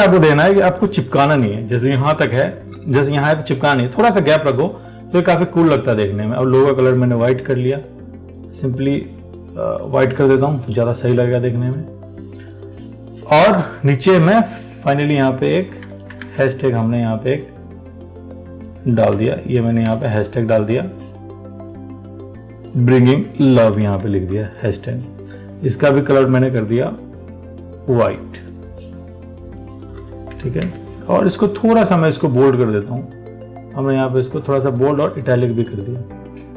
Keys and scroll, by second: 16.1 ctrl+c, 16.5 alt+Tab, 19.3 ctrl+v, 20.1 ctrl+a.